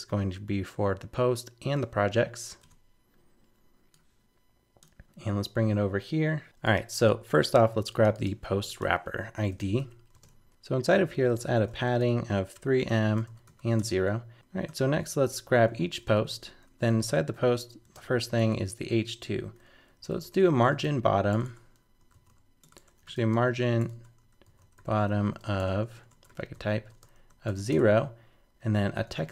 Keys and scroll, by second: 8.5 super+c, 9.8 super+v, 10.5 shift+super+Left, 14.3 super+z.